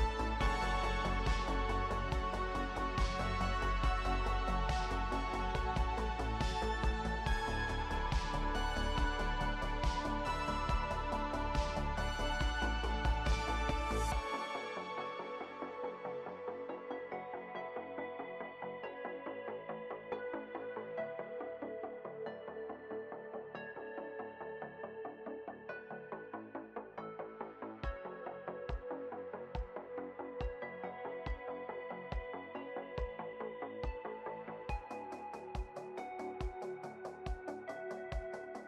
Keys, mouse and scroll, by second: 17.0 ctrl+d, 24.5 ctrl+click, 26.0 ctrl+shift+n.